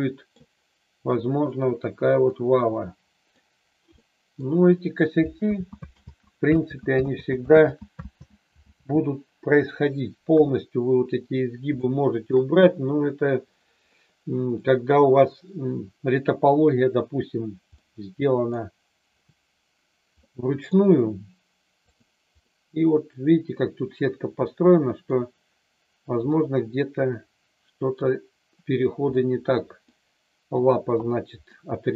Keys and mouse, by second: 2.3-3.3 middle drag, 3.9-4.3 middle drag, 5.6 ctrl+z, 5.9 ctrl+z, 6.6 ctrl+z, 7.0 ctrl+z, 7.6 ctrl+z, 8.2 ctrl+z, 8.8 ctrl+z, 10.3 KP_3, 11.8-12.3 shift+middle drag, 13.9 middle click, 17.8-18.4 middle drag, 20.3 middle click, 22.4-25.1 middle drag, 26.3-28.1 middle drag, 29.1-29.8 middle drag, 31.4-31.9 middle drag.